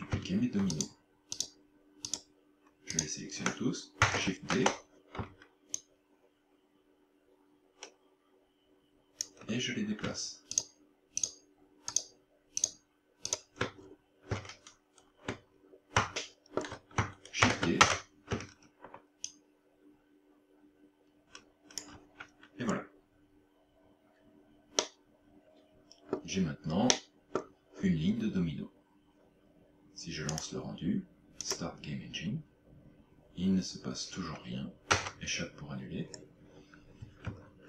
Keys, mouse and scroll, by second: 0.8 shift+right click, 1.4 shift+right click, 2.1 shift+right click, 2.9 shift+right click, 4.1 shift+d, 5.8 ctrl+click, 10.6 shift+right click, 11.3 shift+right click, 11.9 shift+right click, 12.7 shift+right click, 13.3 shift+right click, 13.8 scroll down 6, 15.5 scroll up 1, 16.3 shift+middle click, 17.5 shift+d, 19.3 ctrl+click, 22.6-23.3 scroll down 2, 23.3-24.2 scroll down 1, 24.9 middle click, 26.9 middle click, 30.3 click, 34.9 click, 36.1-37.6 scroll up 3.